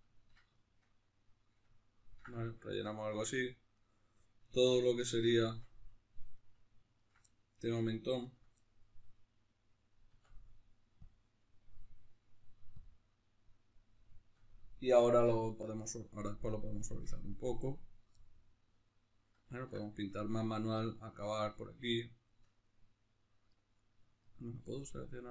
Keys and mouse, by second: 0.6-3.8 middle drag, 3.8-5.6 right drag, 5.6 Tab, 6.4 right click, 7.2 middle click, 8.2 ctrl+right click, 8.6-12.8 middle drag, 11.1 Tab, 12.8 click, 13.1-23.5 middle drag, 17.4 Tab, 23.5-24.7 right drag, 24.7-25.3 middle drag.